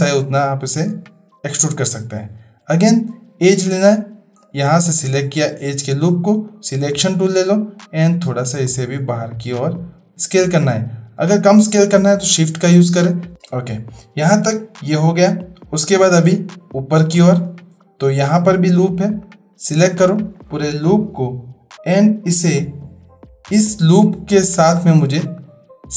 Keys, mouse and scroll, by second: 3.9 2, 4.3 click, 6.5 click, 8.1 s, 16.6-17.3 shift+drag, 19.2 click, 20.1 alt+click, 25.4 alt+shift+click.